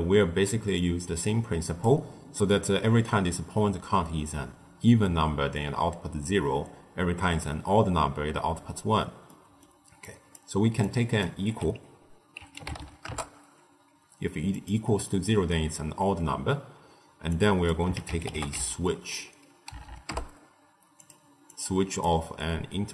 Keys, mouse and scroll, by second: 0.7 drag, 9.2-9.9 middle drag, 9.9 click, 10.7 drag, 17.2 drag, 19.7 Down, 21.4 click, 21.8-22.9 drag.